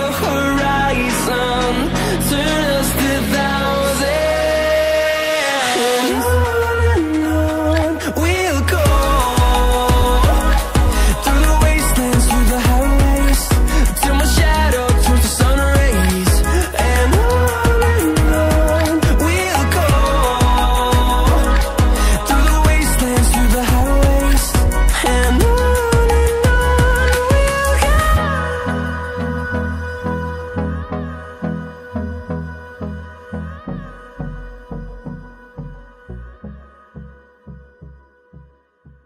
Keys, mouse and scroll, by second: 2.8 scroll up 1, 3.6 click, 9.2-9.6 scroll up 1, 9.9 click, 10.7 scroll down 1, 11.1 click, 15.9-16.7 scroll down 1, 16.7 click, 17.2 scroll up 1, 19.0 click, 19.7 ctrl+c, 19.9 ctrl+v, 20.7 click, 22.6 ctrl+click, 22.7 ctrl+double click, 24.0-27.8 typing, 25.3 Return, 28.7 click, 38.5 double click.